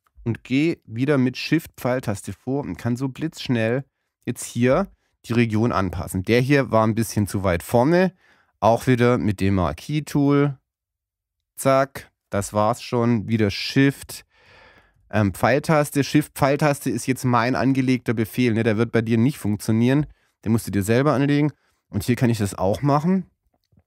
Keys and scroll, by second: 2.0 shift+Left, 14.4 shift+Right, 17.2 shift+Left, 19.2 shift+Right.